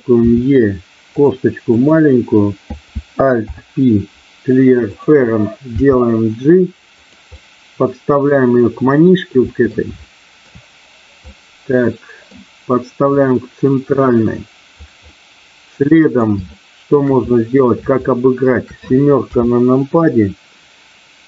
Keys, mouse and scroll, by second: 0.2 e, 3.3 alt+p, 5.7 g, 7.0 click, 7.3-8.3 middle drag, 8.8 middle click, 9.9 shift+middle click, 11.3 middle click, 13.2-14.8 drag, 15.2-16.2 middle drag, 16.4 shift+middle click, 17.3-18.5 middle drag, 19.2 KP_7.